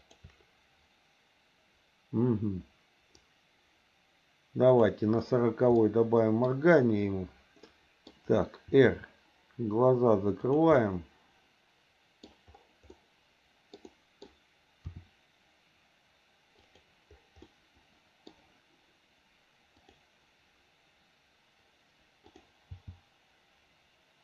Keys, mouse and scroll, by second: 0.0 shift+click, 3.2-4.9 drag, 5.7 middle click, 7.7 middle click, 8.7 r, 10.7-12.2 middle drag, 12.9 middle click, 13.8 middle click, 14.9 r, 17.5 middle click, 19.8 click, 22.2 click, 22.7 g.